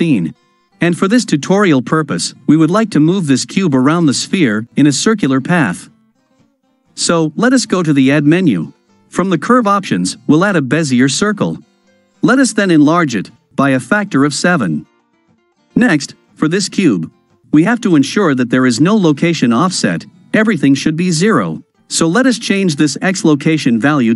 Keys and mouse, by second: 13.2 s, 13.6 KP_7, 14.0 Return, 16.0 click, 22.4 click.